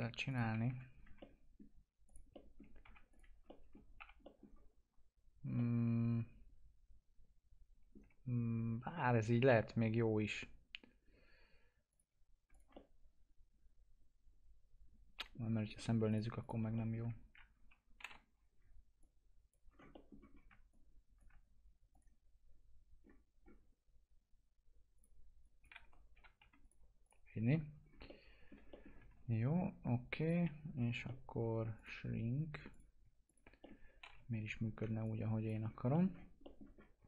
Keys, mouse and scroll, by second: 0.6 F4, 1.1 alt+middle click, 2.0 click, 2.3 middle click, 2.8 F4, 3.0 click, 3.9 F4, 4.2 middle click, 5.5-8.9 alt+middle drag, 8.9-11.9 alt+middle drag, 11.9 click, 12.5 click, 13.0-15.6 alt+middle drag, 15.6-16.0 scroll up 1, 16.0 click, 17.9 t, 18.5-18.9 scroll down 1, 18.9 click, 19.6 scroll down 1, 19.9 middle click, 20.3 scroll up 1, 20.7 ctrl+click, 22.9-24.9 scroll down 1, 24.9 click, 25.8 1, 26.6 click, 27.3-27.8 scroll down 1, 28.0 alt+middle click, 29.1 ctrl+z, 30.2 click, 31.0 middle click, 31.7 click, 33.6 alt+middle click, 34.0 t, 34.4-34.8 scroll down 1, 35.0 ctrl+click, 35.6 scroll down 1, 35.9 middle click, 36.7 scroll up 1.